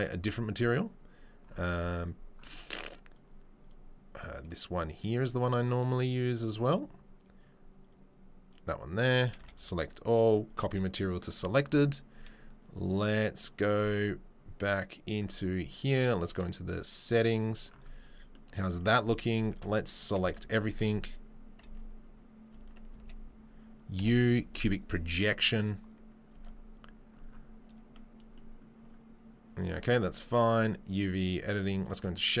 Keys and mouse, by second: 0.1-3.6 middle drag, 3.6 click, 3.7-4.2 middle drag, 4.2-5.1 drag, 5.1-6.3 middle drag, 6.3 click, 6.4-7.8 middle drag, 7.8-9.4 drag, 9.4-10.4 middle drag, 9.4 a, 10.4-15.2 drag, 15.2-30.5 middle drag, 19.7 Tab, 20.2 a, 21.8 Tab, 22.7 Tab, 23.0 a, 23.9 u, 26.5 Tab, 30.5-32.4 drag.